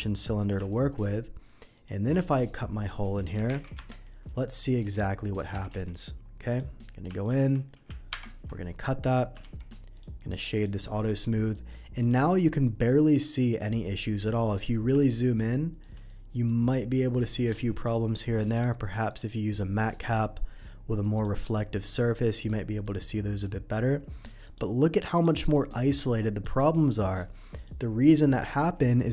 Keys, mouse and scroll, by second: 0.1 middle click, 0.7 shift+a, 1.7 click, 3.0 r, 3.3 y, 3.4 9, 3.5 0, 3.7 Return, 4.8 s, 5.4 click, 5.7 x, 6.5 click, 7.2 click, 8.1 ctrl+KP_Subtract, 9.4 shift+2, 9.9 click, 10.1 right click, 10.5 click, 11.2 middle click, 12.0 middle click, 13.1 middle click, 14.5 scroll up 1, 15.0-15.8 shift+middle drag, 16.0 shift+middle click, 17.5 shift+middle click, 18.5 shift+click, 19.0 click, 20.0 click, 21.1 click, 21.5-22.4 middle drag, 22.8 middle click, 24.4 click, 25.1 click, 25.5 middle click, 26.4 middle click, 27.5 click, 28.2 click.